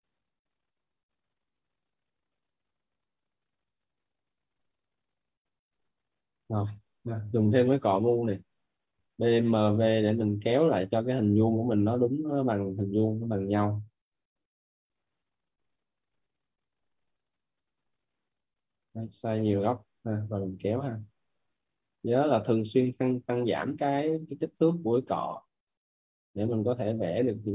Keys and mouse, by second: 1.5 right click, 2.8 right click, 3.2 click, 6.0 right click, 6.8 right click, 7.4-8.9 typing, 9.1 right click, 11.3 click, 12.7 right click, 14.3 click, 14.7 right click, 15.7 click, 16.1 right click, 17.3 click, 19.3 right click, 20.0 click, 20.3 right click, 22.2 click, 24.2 right click, 25.7 click, 26.4 right click.